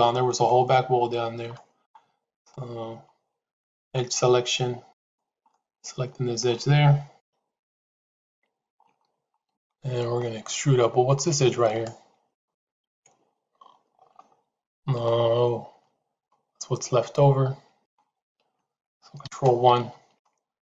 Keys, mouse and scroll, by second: 1.4 middle click, 2.3 click, 5.4 middle click, 7.1 KP_3, 7.7 KP_Decimal, 9.5 shift+middle click, 12.4-17.8 middle drag, 19.1 ctrl+KP_1, 20.1 shift+middle click.